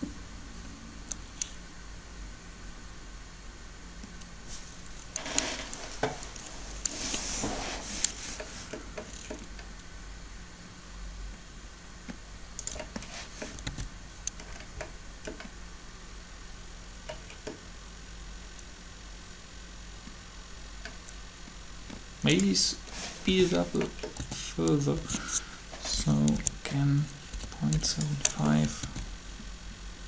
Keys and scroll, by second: 13.6 alt+a, 23.3 a, 26.3-28.2 typing, 28.8 alt+a.